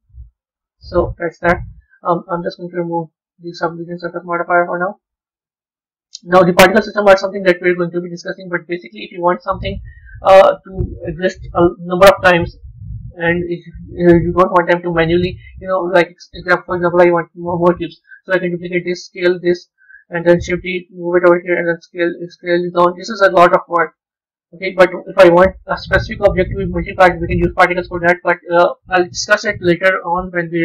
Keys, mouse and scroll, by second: 2.7 click, 4.6-6.3 drag, 13.3-14.1 scroll down 5, 14.1-16.2 middle drag, 16.2-17.8 scroll down 2, 17.8 shift+d, 18.8 s, 20.2 shift+d, 21.5 s, 23.4 ctrl+z, 23.7 ctrl+z, 24.0 ctrl+z, 24.4 ctrl+z.